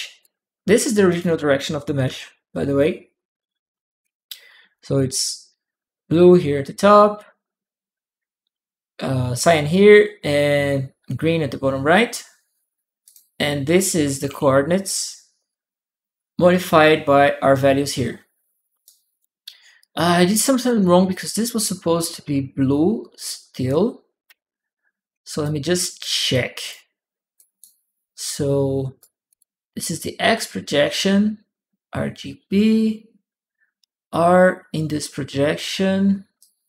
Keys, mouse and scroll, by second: 0.9 click, 1.9 shift+p, 3.8 shift+click, 3.9 p, 12.8 click, 14.1 shift+p, 18.6 shift+click, 18.7 p, 18.7 shift+right click, 25.2 shift+click, 25.2-26.5 shift+right drag, 27.1 click, 27.9 click, 29.1 click, 36.2-36.6 drag.